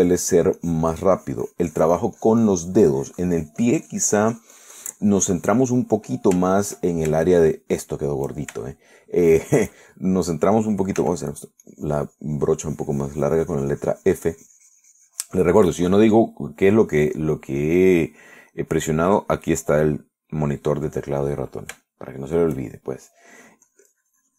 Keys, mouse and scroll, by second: 0.6-1.7 shift+middle drag, 1.8-6.9 shift+drag, 7.0 middle click, 7.7 shift+click, 8.5 shift+click, 9.9 shift+click, 10.5-11.7 shift+drag, 12.3 f, 12.6 click, 12.9-16.9 drag, 22.4 middle click, 23.1 shift+middle click, 24.0 shift+middle click.